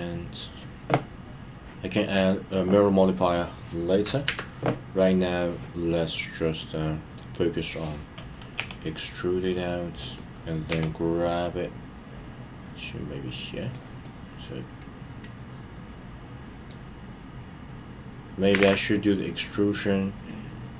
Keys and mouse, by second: 6.7 click, 10.0 click, 13.6 click, 14.0-16.7 middle drag.